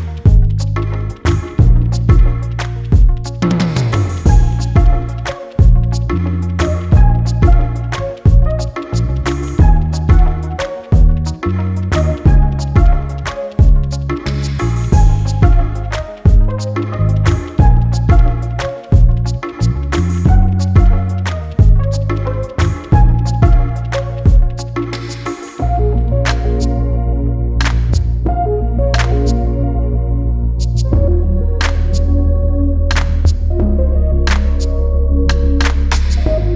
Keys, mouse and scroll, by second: 0.1-0.6 scroll down 1, 1.4 click, 3.3 click, 7.8 click, 12.0 scroll down 1, 13.5 click, 13.9 scroll down 1, 14.3 click, 14.7-15.7 scroll down 1, 15.7 click, 16.4-16.8 scroll up 1, 16.8 click, 18.5 scroll down 1, 18.9 click, 19.3-19.6 scroll down 1, 19.8-20.2 scroll up 1, 20.2 click, 20.6-21.0 scroll up 1, 21.3 click, 21.7-22.1 scroll up 1, 22.4 click, 28.9 click, 34.1 click.